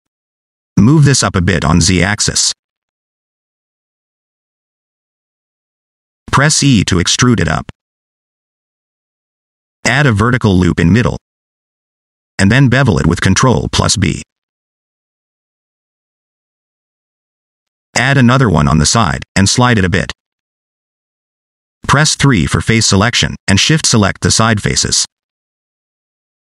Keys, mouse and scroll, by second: 0.4 scroll up 1, 1.2 middle click, 2.9 click, 4.2 click, 5.9 shift+middle click, 6.4 e, 9.9 middle click, 10.9 ctrl+r, 12.1-12.5 scroll up 1, 12.8 ctrl+b, 16.2 middle click, 16.9 ctrl+r, 22.5 3, 23.3 click, 24.3 shift+click, 24.9 shift+click, 25.9 shift+click.